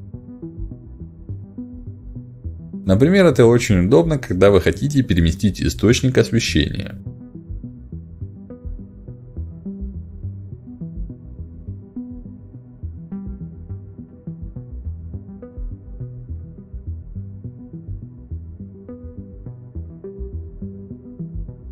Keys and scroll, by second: 4.1 w, 6.2 e, 11.1 r, 12.5 w, 14.8 w.